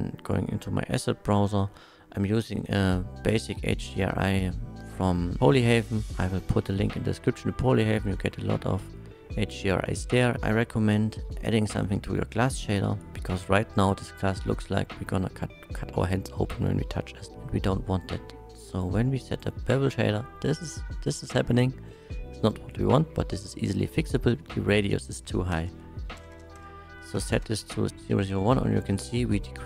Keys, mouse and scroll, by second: 2.3 click, 2.6 click, 5.4 click, 6.1 middle click, 6.8 middle click, 8.0-8.5 middle drag, 9.1-11.4 middle drag, 11.7 click, 12.9 click, 12.9 shift+a, 13.1 middle click, 13.8 middle click, 16.2 middle click, 17.9-18.8 drag, 19.6 middle click, 20.6 middle click, 21.5 middle click, 23.5 click, 25.6-27.1 typing, 27.3 Return, 28.2 shift+middle click, 28.2 KP_1.